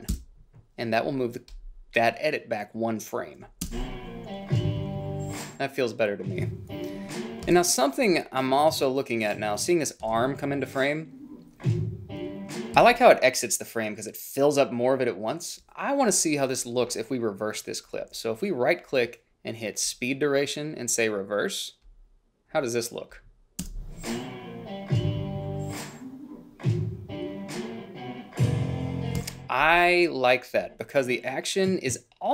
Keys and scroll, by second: 0.2 Return, 3.8 space, 7.5 space, 10.2 space, 12.9 space, 23.8 space, 29.3 space.